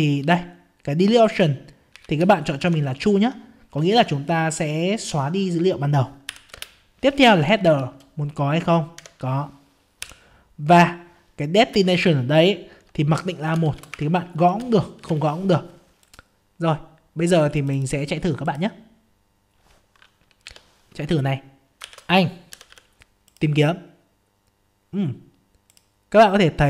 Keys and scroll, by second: 20.4 F5, 21.2 F5.